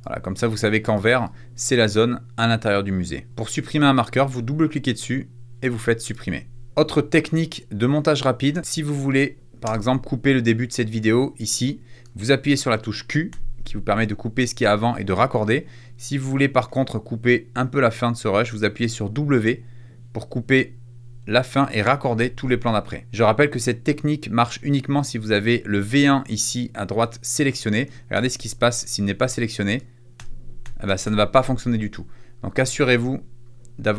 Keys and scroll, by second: 8.4 space, 9.5 space, 13.3 q, 22.1 w, 27.7 super+z, 30.1 q.